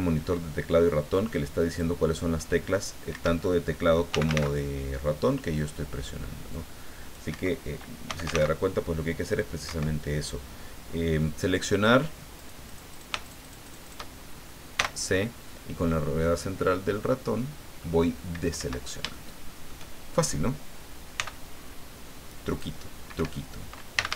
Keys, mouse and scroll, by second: 1.1 click, 3.1 Escape, 4.1 f, 4.3 a, 5.3 middle click, 6.5 click, 7.3 Escape, 8.1 f, 8.2 a, 8.3 c, 9.6 Escape, 12.3 right click, 13.2 shift+right click, 14.7 c, 15.9-18.0 middle drag, 18.6 Escape, 19.1 shift+middle click, 21.1 c, 22.5 click, 23.2 Escape, 24.0 f, 24.1 a.